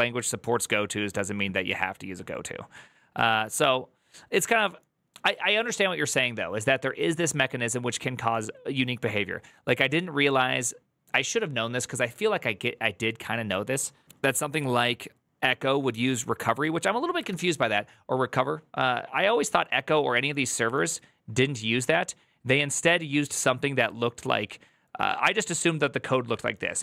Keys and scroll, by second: 17.2 alt+=.